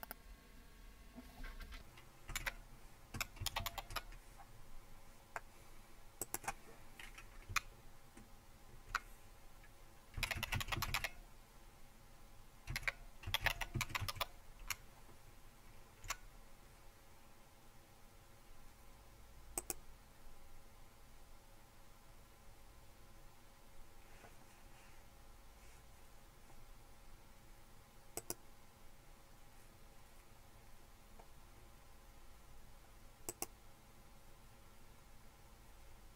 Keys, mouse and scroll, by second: 0.1 click, 2.5-4.1 typing, 6.3-7.9 drag, 7.5-8.9 Left, 9.9-11.4 typing, 12.7-16.2 typing, 14.6 Delete, 19.6 click, 28.2 click, 33.3 click.